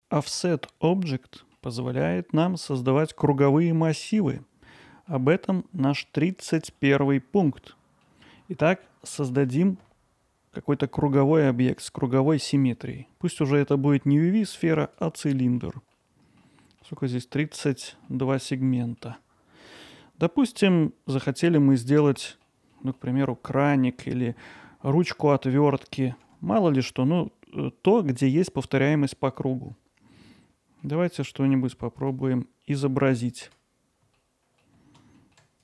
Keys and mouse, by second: 0.9-1.6 middle drag, 4.9 middle drag, 4.9 drag, 5.0 middle click, 7.1-8.0 middle drag, 8.4 middle drag, 15.3-15.6 drag, 15.9 alt+drag, 16.0-16.4 alt+middle drag, 16.6 ctrl+alt+middle drag, 18.1-18.4 alt+middle drag, 18.8 middle drag, 21.6 middle drag, 22.0-22.4 alt+middle drag, 22.7 alt+middle click, 30.4 alt+middle click, 32.0 click, 32.8 middle drag, 34.1 middle click, 34.6 alt+middle click.